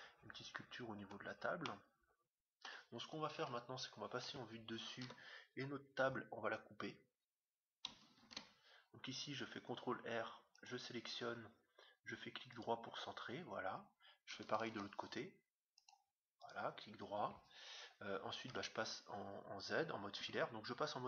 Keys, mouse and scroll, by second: 0.6-1.6 scroll up 1, 1.6-3.2 middle drag, 3.3 middle click, 3.3 KP_7, 4.2-6.0 middle drag, 5.0 Tab, 8.3 ctrl+r, 14.7 ctrl+r, 18.5 z, 20.3 z.